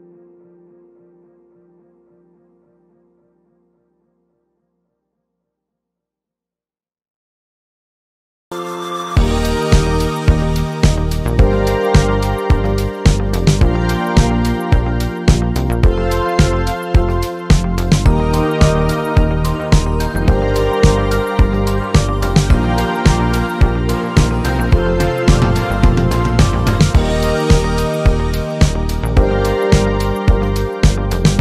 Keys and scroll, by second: 17.2 m, 17.6 BackSpace, 17.8 m.